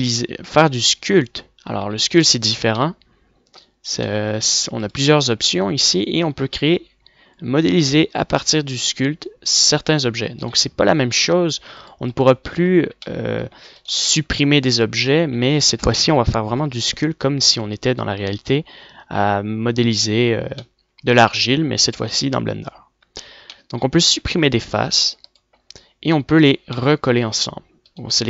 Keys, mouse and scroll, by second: 1.8 f, 2.1-2.5 drag, 4.8 right click, 11.8 click, 12.2 Tab, 13.2 a, 14.4 middle click, 16.9-18.0 middle drag, 20.9 middle click, 21.5 middle click, 23.3 middle click, 23.9 x, 26.1 click, 27.7-28.2 middle drag.